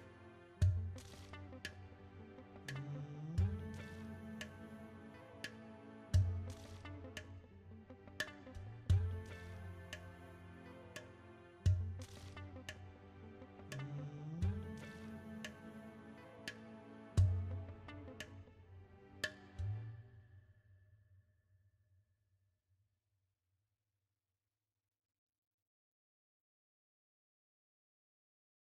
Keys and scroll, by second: 3.5 shift+a, 6.4 KP_1, 7.9 s, 10.3 KP_7, 11.4 s, 21.4 Tab, 22.3 ctrl+r, 23.7 ctrl+r, 28.1 Tab.